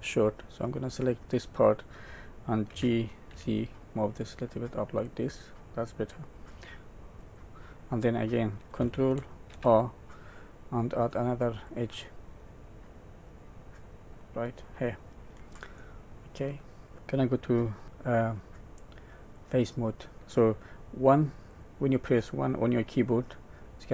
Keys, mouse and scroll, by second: 0.6 click, 2.7 g, 7.2 click, 9.5 ctrl+r, 15.8 middle click, 19.3 click, 21.5 click.